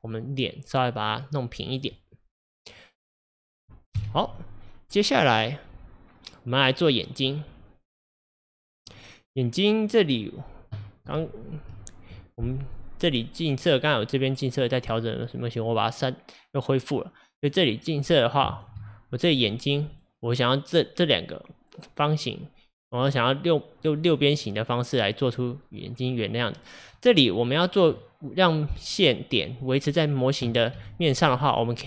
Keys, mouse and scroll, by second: 0.0-1.8 middle drag, 1.8 click, 2.0-4.0 middle drag, 4.0 KP_1, 4.8 scroll up 1, 5.4-7.2 scroll down 2, 7.3 click, 8.9 click, 11.2 q, 12.0 click, 12.7 click, 13.6 click, 16.7 click, 17.4 click, 18.6 ctrl+click, 19.4-20.0 scroll up 2, 20.0 click, 24.0 click, 27.0 middle click, 27.4-28.0 scroll down 1, 28.0-30.8 middle drag, 30.8 KP_1, 31.4-31.8 scroll up 5.